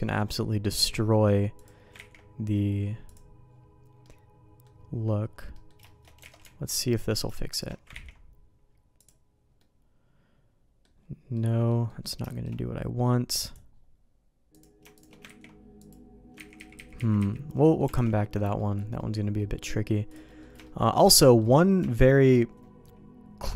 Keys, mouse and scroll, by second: 0.6 middle click, 1.9 ctrl+e, 3.5-4.6 middle drag, 5.5 middle click, 5.8 shift+middle click, 6.3 alt+a, 7.9 ctrl+e, 9.6-10.8 middle drag, 11.4 middle click, 11.9 middle click, 12.3 shift+middle click, 13.4 click, 14.5 click, 14.9 shift+click, 15.2 ctrl+e, 16.4 ctrl+z, 16.6 ctrl+z, 16.7 ctrl+z, 17.0 ctrl+z, 17.2 ctrl+z, 17.6 middle click, 17.9 alt+a, 18.2 middle click, 18.6 middle click, 19.0 middle click, 19.4 middle click, 20.1 click, 20.3 middle click, 20.6 shift+middle click, 21.2 middle click, 21.9 shift+middle click.